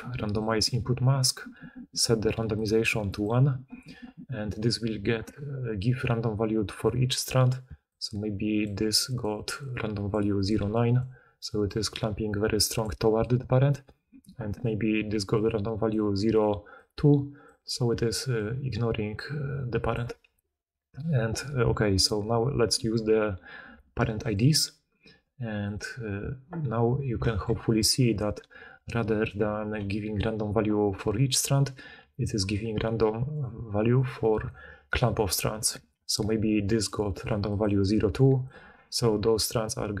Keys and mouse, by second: 7.6-13.0 d, 12.8-24.3 drag, 12.8-27.1 middle drag, 12.8-27.1 right drag, 15.0-18.2 typing, 19.9 d, 20.0 d, 20.3 d, 20.6-22.2 d, 25.6-34.5 drag, 32.0-40.0 typing, 36.3-38.6 drag, 36.3-38.6 middle drag, 36.3-38.6 right drag.